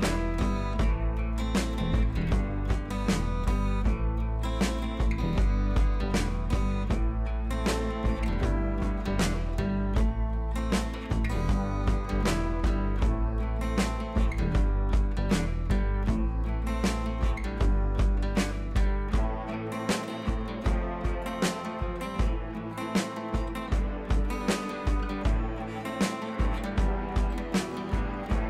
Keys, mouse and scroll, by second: 0.2 ctrl+v, 0.6 scroll down 1, 1.0 ctrl+t, 1.2 scroll down 1, 1.9-3.6 alt+drag, 3.6 scroll up 1, 4.1 click, 5.1-10.1 alt+drag, 11.8-13.1 drag, 15.4 ctrl+a, 16.0 ctrl+c, 17.1 click, 18.5 ctrl+v, 18.9-19.6 scroll down 2, 19.2 ctrl+t, 20.2-21.7 alt+drag, 22.4 scroll up 1, 23.1-26.8 drag, 26.8 scroll down 1, 27.4-28.4 drag.